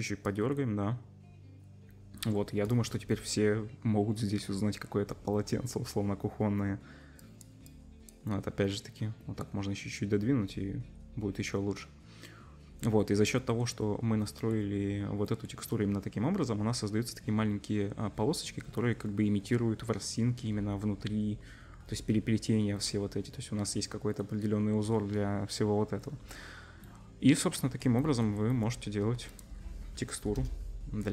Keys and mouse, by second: 2.7-7.2 drag, 11.0-14.3 middle drag, 15.3 middle click, 18.6 middle click.